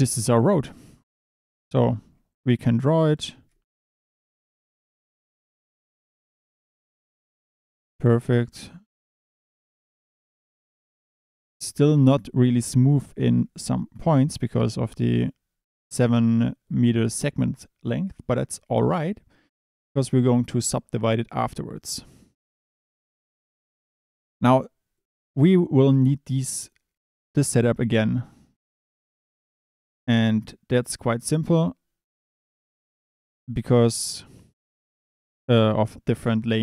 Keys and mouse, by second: 1.5 click, 1.6 Tab, 2.7 e, 3.9-6.0 typing, 4.0 click, 6.6 click, 7.4-9.4 typing, 9.2 click, 9.7 click, 9.9 Tab, 10.1 click, 11.1 click, 13.5 click, 23.2 click, 32.4 click.